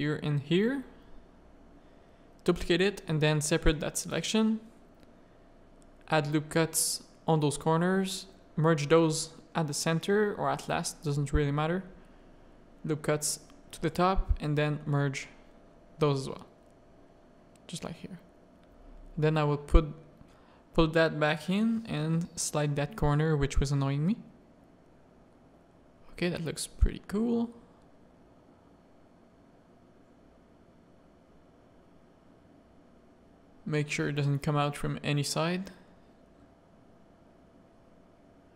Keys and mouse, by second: 0.7 shift+click, 1.1 middle click, 1.7 shift+d, 3.3 Tab, 3.9 Tab, 4.3 z, 4.5 a, 4.8 1, 5.2 ctrl+r, 6.9 a, 7.9-10.7 drag, 11.0 a, 12.1 ctrl+r, 13.3 a, 13.8 click, 14.1 shift+click, 14.4-15.6 drag, 15.8 a, 16.3 z, 17.0 Tab, 17.2-17.9 middle drag, 18.1 Tab, 18.1 a, 19.0 click, 20.1 middle click, 21.3 g, 22.5 click, 22.9 g, 24.2 z, 24.6 Tab, 24.9 middle click, 25.6 Tab, 25.8 a, 26.9 g, 27.6 Tab, 27.9 middle click, 29.0 middle click, 29.9 a, 31.4 Tab, 31.8 middle click, 32.1 z, 32.5 middle click, 32.9 z, 33.3-34.7 middle drag, 34.8 Tab, 35.1 a, 35.6 ctrl+r, 36.6 Tab, 37.1 click.